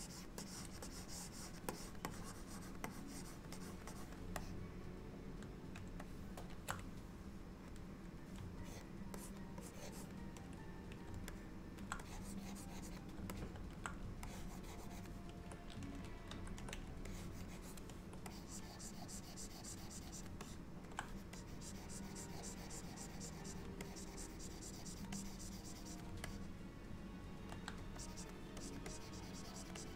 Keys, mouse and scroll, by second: 0.0 click, 0.5 click, 0.9 click, 1.8 click, 2.2 click, 3.0 click, 3.6 click, 4.0 click, 4.5 middle click, 6.1 shift+middle click, 8.7 ctrl+click, 9.3 ctrl+click, 9.7 ctrl+click, 11.4 middle click, 12.1 click, 13.4 middle click, 14.3 ctrl+click, 16.4 ctrl+z, 17.1 ctrl+click, 17.6 ctrl+click, 18.4 click, 20.5 middle click, 21.4 click, 23.9 click, 25.2 click, 26.3 middle click, 28.1 click, 28.7 click, 29.0 click, 29.8 click.